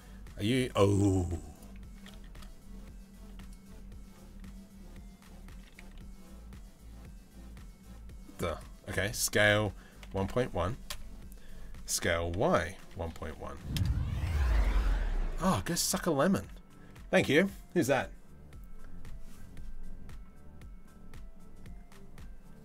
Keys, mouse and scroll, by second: 0.8 z, 1.6 s, 5.1 s, 13.7 z, 14.5 middle click.